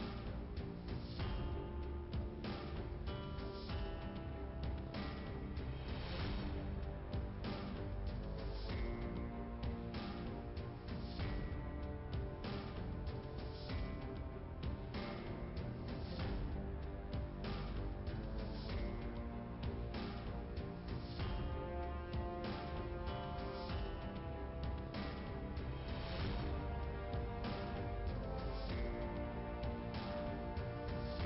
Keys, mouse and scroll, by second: 0.7 click, 1.5 click, 2.4-2.9 scroll down 1, 3.3 click, 3.4 double click, 3.5 double click, 4.4 click, 5.3 click, 8.9 click, 11.4 click, 12.4 click, 13.6 click, 15.2 click, 16.1 click, 17.4 click, 20.3 click, 21.9 click, 23.6 click, 24.4 click, 24.6 click, 25.6 click, 27.1 click, 27.2 click, 28.3 click, 30.5 click, 30.7 click.